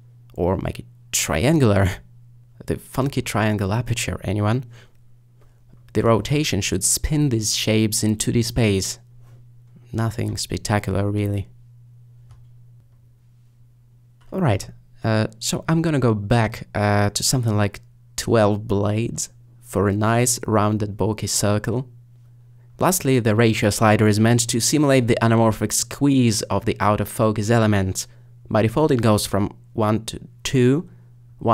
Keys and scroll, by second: 14.0 0, 16.1 5, 18.5 typing.